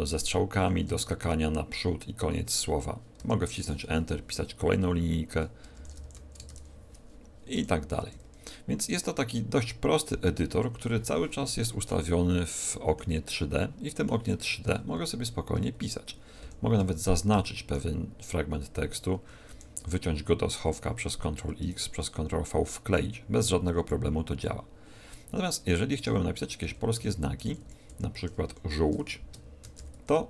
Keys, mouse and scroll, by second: 0.2 ctrl+Left, 0.6 ctrl+Right, 3.2 Return, 5.7-6.4 typing, 7.5 Up, 8.0 Left, 8.2 Left, 11.8 middle click, 13.2 middle click, 14.9 Right, 15.2 Right, 15.5 Left, 15.8 Down, 16.4 Up, 16.9 shift+Left, 17.4 shift+Left, 19.4 ctrl+x, 21.6 ctrl+v, 25.2 Tab, 25.9 Tab, 26.6 Down, 26.9 End, 27.4 shift+Up, 27.6 shift+Up, 27.8 shift+Home, 28.4 Delete, 29.6 z, 29.7 o, 30.0 l.